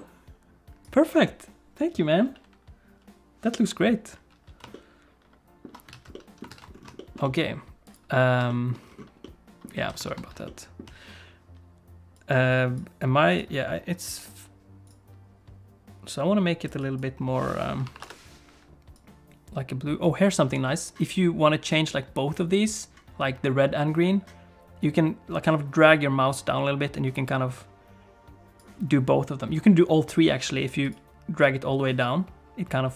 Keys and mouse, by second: 4.7 ctrl+middle click, 5.9 alt+a, 6.1 ctrl+middle click, 6.5 ctrl+s, 7.0 shift+click, 7.2 middle click, 8.5 shift+click, 9.2 middle click, 9.8 alt+a, 10.1 ctrl+s, 10.4 shift+middle click, 12.2 click, 30.9 click.